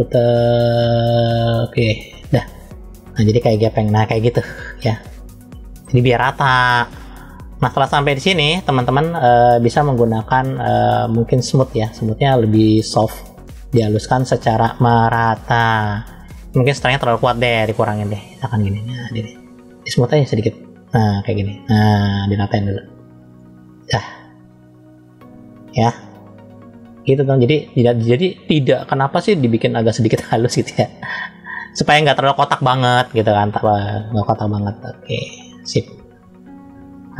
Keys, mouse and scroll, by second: 2.5-5.6 middle drag, 6.5-7.0 scroll up 1, 7.0 middle click, 7.8 scroll down 2, 14.0-14.5 scroll up 1, 14.5 middle click, 17.5-18.8 drag, 19.8 click, 27.1 middle click, 28.4 scroll up 1, 29.1 middle click, 33.6 click, 34.9 click.